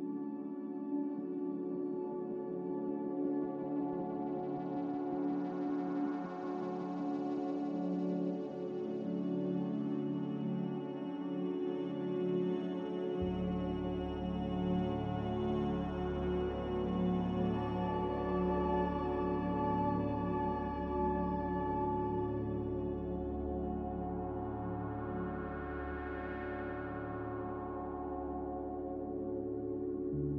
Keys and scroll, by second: 25.1 1, 25.6 Return, 28.7 1, 28.8 Return, 29.9 5, 30.0 Return.